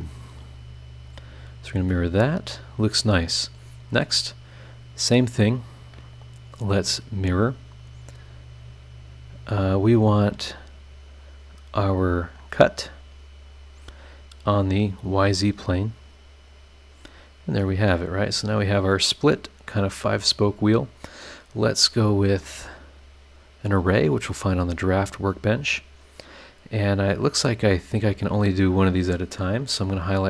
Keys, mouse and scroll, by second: 1.0 click, 1.9-4.3 middle drag, 2.0-4.3 drag, 2.0-4.3 right drag, 6.8 click, 8.0-8.7 scroll down 4, 12.8 click, 14.5 click, 15.3 click, 16.5 click, 17.2 scroll down 1, 17.6-21.4 middle drag, 17.6-21.4 drag, 23.3 click, 24.2 click, 25.0 click, 27.0 scroll up 2, 27.6 scroll down 2, 28.1 click, 30.0 click.